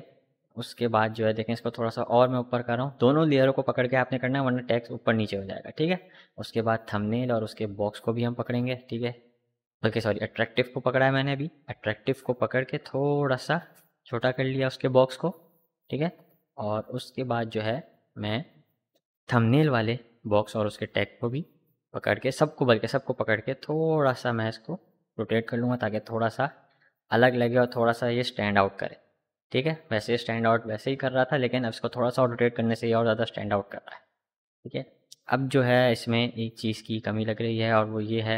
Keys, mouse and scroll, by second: 0.9 Up, 3.6 click, 4.8 ctrl+t, 6.5 click, 8.5 ctrl+t, 9.7-12.0 alt+drag, 12.0-15.7 alt+shift+drag, 17.3 click, 18.8 shift+Up, 20.3 click, 23.2 ctrl+t, 24.0-31.9 drag, 34.9 click.